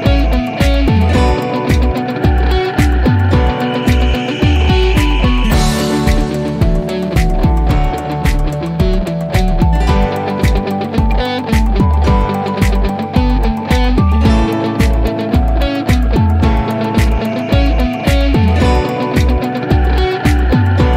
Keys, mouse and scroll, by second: 3.3 click, 6.8-7.6 drag, 9.0 right click, 9.8-10.3 click, 10.9 0, 11.4 Return, 12.8-13.3 click, 13.7 0, 14.0 Return, 15.4-18.4 drag, 19.3-20.3 typing.